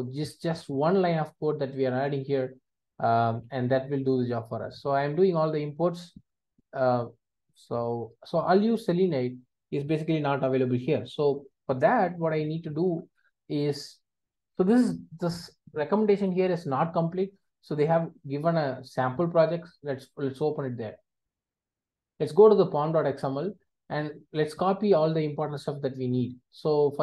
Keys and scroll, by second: 1.9 alt+Return, 5.6 alt+Return, 8.6 alt+Return.